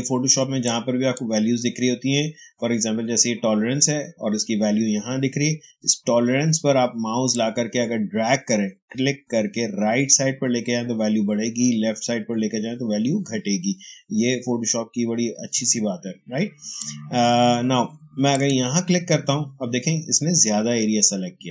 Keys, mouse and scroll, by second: 0.5-3.5 drag, 0.9 h, 7.2 click, 7.3-17.2 drag, 18.2 click.